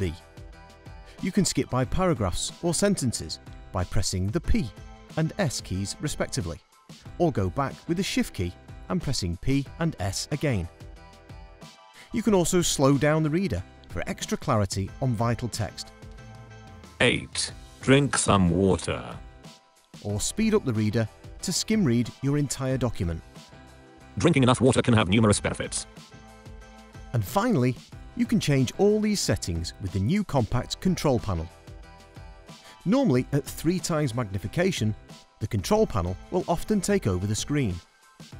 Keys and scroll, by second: 37.7 super+Down.